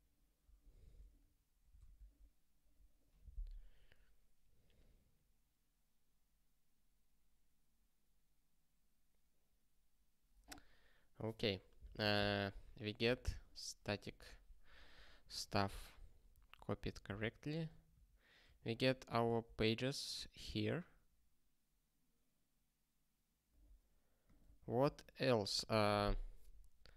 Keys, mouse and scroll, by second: 1.7 ctrl+k, 2.8 click, 12.9 click, 13.2 ctrl+space, 13.3 ctrl+a, 15.0 ctrl+g, 16.6 ctrl+p, 17.5 ctrl+space, 17.6 ctrl+n, 17.9 ctrl+n, 18.4 ctrl+g, 20.4 ctrl+g, 24.2 click, 24.5 ctrl+b, 24.8 Return.